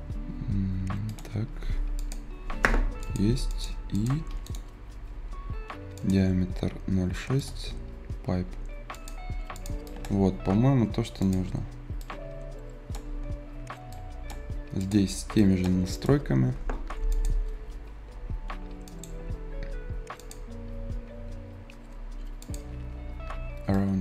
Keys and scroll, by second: 16.9 Escape.